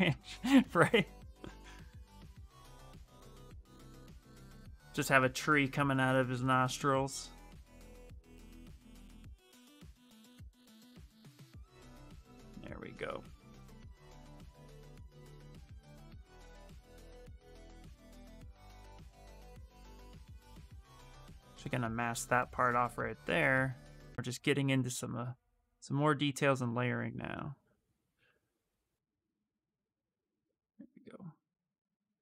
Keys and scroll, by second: 17.8 ctrl+z, 17.9 ctrl+z, 18.3 ctrl+z, 18.8 s.